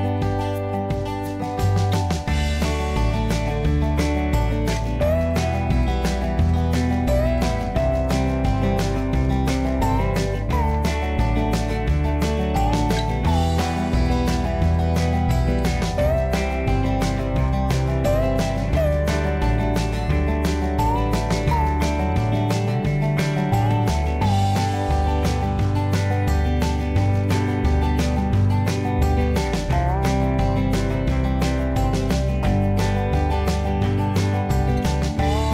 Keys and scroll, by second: 0.5-1.5 typing, 7.6 h, 9.8 q, 13.4-14.3 typing, 28.6 2, 31.2 2, 31.8 BackSpace, 32.0 Return, 32.0 1.